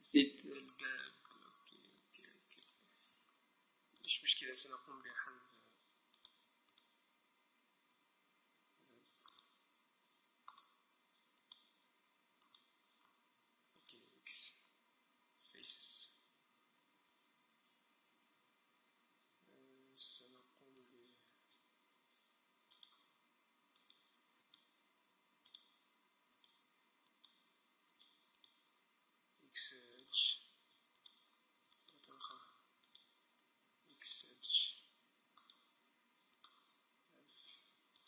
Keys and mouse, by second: 1.0 Tab, 2.1 middle click, 4.1-8.6 right drag, 8.6 z, 9.6-13.1 right drag, 13.1 middle click, 13.2 click, 13.2 right click, 13.4 middle click, 14.5 x, 16.8 click, 16.8 right click, 16.8 z, 17.2 middle click, 22.8-24.5 drag, 23.9-26.2 right drag, 25.6-27.2 drag, 26.4 right click, 27.1 middle click, 27.2-30.1 right drag, 29.4 x, 30.1-31.1 middle drag, 31.1-34.6 right drag, 33.8 x, 35.6-38.0 right drag, 37.4 f.